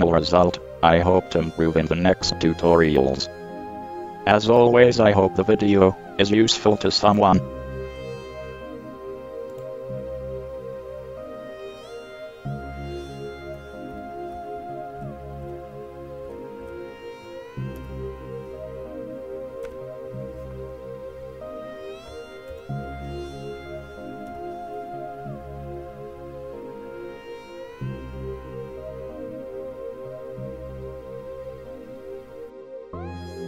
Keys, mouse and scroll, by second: 0.7 n, 1.0 n, 3.0-4.3 drag, 7.3-9.0 drag, 9.7 click, 14.1 t, 15.2 t, 16.5 t, 16.5 n, 18.0 n, 18.0 KP_7, 22.7 KP_1, 24.5 middle click, 24.5 KP_3.